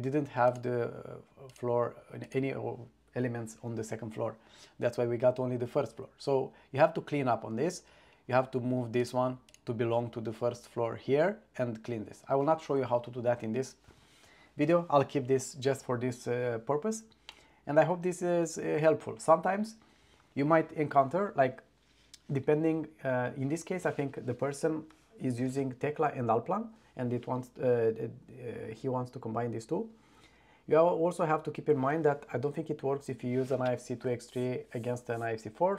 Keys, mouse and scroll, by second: 0.6 click, 1.6 click, 2.3 click, 9.1 click, 9.6 click, 17.4-18.6 middle drag.